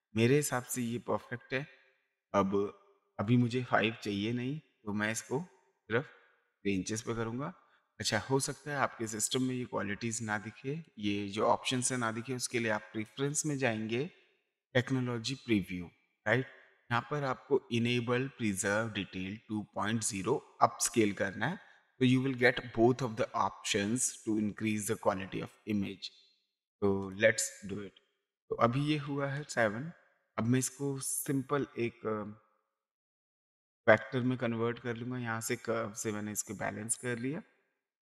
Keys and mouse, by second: 5.8 click, 7.0 KP_3, 8.0 Return, 10.8 click, 12.9 click, 14.5 click, 27.0 click, 28.6 ctrl+d, 29.4 ctrl+space, 29.4 ctrl+click, 32.9 click, 34.0 click, 35.6 click, 36.9 click.